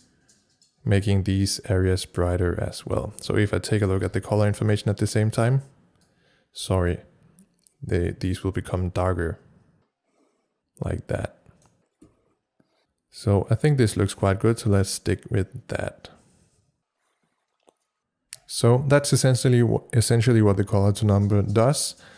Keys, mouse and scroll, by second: 4.0 c, 12.0 c, 12.7-17.5 drag.